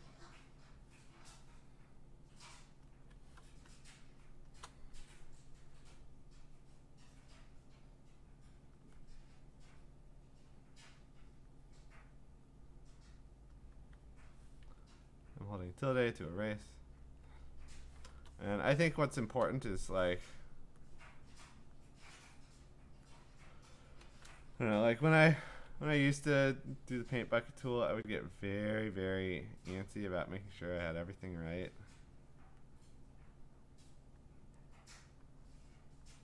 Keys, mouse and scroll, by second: 1.9-4.5 typing, 2.9 click, 4.5 click, 8.7 click, 10.4 click, 11.5 click, 13.5 click, 14.7-15.9 `, 15.9 click, 16.1 `, 16.3 `, 17.0 click, 19.4 click, 20.7 click, 21.7 click, 22.8 click, 25.0 ctrl+z, 25.5 ctrl+z, 28.0 click, 30.7 click, 32.4 click, 34.2 click.